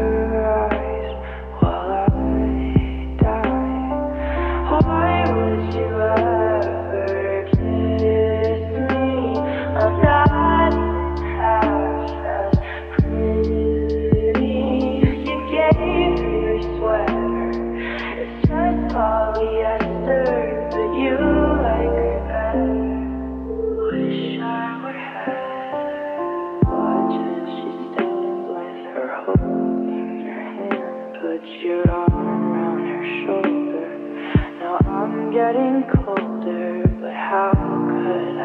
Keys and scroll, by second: 1.3 Return, 2.4-3.5 typing, 7.4-10.6 typing, 8.5 Tab, 12.0 2, 12.3 0, 12.4 Return, 15.3 b, 16.8-18.6 typing, 36.9-38.4 typing.